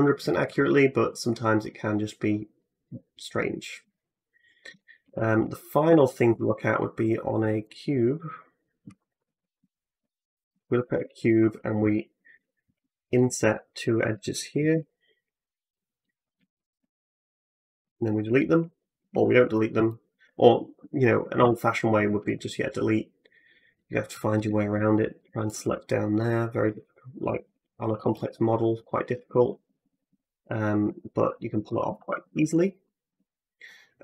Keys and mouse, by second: 2.4-3.7 middle drag, 4.9 Tab, 5.7 x, 6.3 shift+a, 7.5-8.7 middle drag, 9.1 alt+g, 9.2 middle click, 9.5-15.7 shift+drag, 10.8 Tab, 12.3 middle click, 12.3 right click, 12.3 3, 13.3 shift+middle click, 13.3 shift+right click, 14.6 i, 15.7 middle click, 16.2 shift+click, 16.6-18.8 middle drag, 17.6 x, 18.8 ctrl+click, 18.9 ctrl+z, 19.0 middle click, 19.9 ctrl+click, 20.1-23.2 middle drag, 21.2 x, 22.2 2, 23.2 click, 23.2-25.3 middle drag, 25.3 shift+click, 25.4-27.0 shift+middle drag, 26.5 f, 27.0 click, 27.1-28.7 middle drag, 27.3 f, 27.7 f, 29.2 ctrl+z, 29.4 ctrl+z, 29.5 ctrl+z, 29.7 ctrl+z, 29.9 ctrl+z, 30.7 ctrl+z, 31.4 ctrl+z, 31.8 ctrl+z, 32.1 ctrl+z, 32.3-34.0 middle drag, 32.9 w.